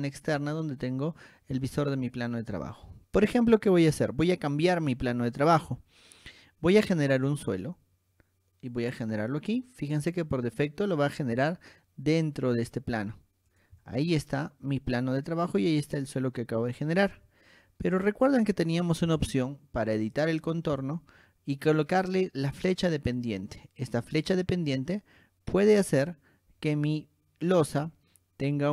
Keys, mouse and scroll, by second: 0.0 middle click, 0.6 click, 2.9-4.0 middle drag, 4.9 middle click, 7.3 click, 9.0 click, 10.2 click, 11.3 click, 12.6 click, 13.7 click, 14.0-17.3 shift+middle drag, 18.3 click, 20.3 click, 22.4 click, 22.8 scroll up 2, 24.3 click, 26.1 click, 26.8 scroll down 2, 27.1 shift+middle click.